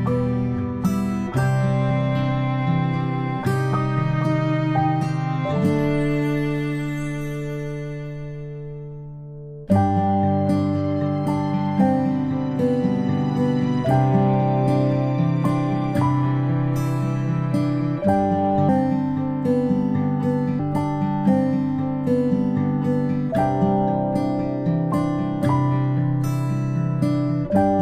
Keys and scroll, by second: 7.9-8.6 space, 9.3 ctrl+z, 9.6 ctrl+z, 23.8 space, 24.0-27.8 space.